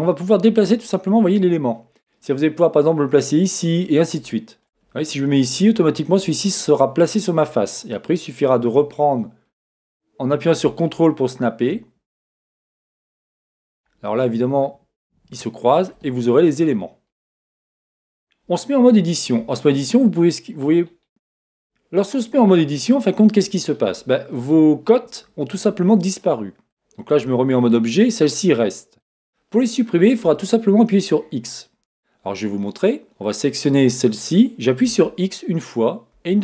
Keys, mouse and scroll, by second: 5.1-8.7 middle drag, 8.7-11.7 drag, 13.0 ctrl+click, 14.7-15.9 ctrl+drag, 16.3-33.3 middle drag, 18.8 Tab, 21.3-22.9 scroll up 2, 27.3 Tab, 33.3-36.4 drag.